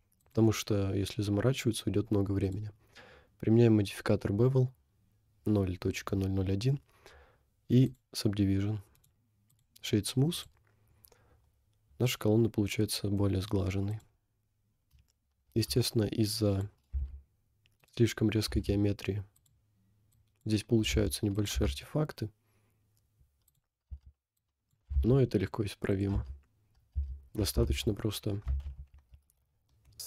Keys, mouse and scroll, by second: 0.2 click, 0.9 click, 7.9 click, 9.0 right click, 10.4 click, 10.9 scroll down 1, 11.4 scroll down 1, 12.0 middle click, 13.2 middle click, 13.3-13.9 scroll up 1, 13.9 click, 15.0 scroll up 1, 15.6 Tab, 16.3 click, 17.0 g, 18.6 g, 19.4-20.4 drag, 20.9 g, 21.6 Tab, 21.9 scroll down 1, 23.5 click, 23.9 Tab, 24.5 click, 24.9 g, 26.2 Tab, 27.0 Tab, 27.7 ctrl+z, 28.7 ctrl+z, 28.8 ctrl+z.